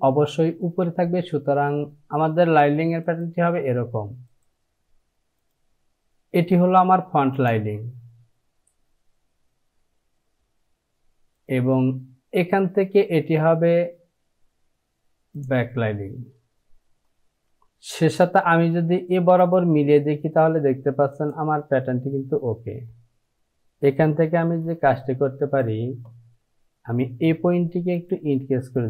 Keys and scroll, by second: 25.6 Return.